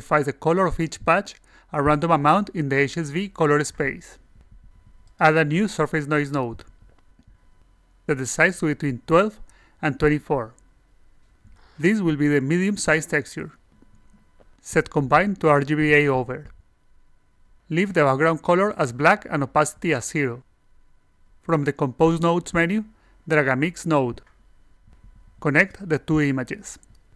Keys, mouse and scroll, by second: 0.0-1.7 alt+drag, 2.6 click, 5.0 click, 6.5-7.3 drag, 8.9 click, 9.2 click, 14.6 click, 22.0 click, 22.6-23.9 drag, 24.9 click, 26.6 click.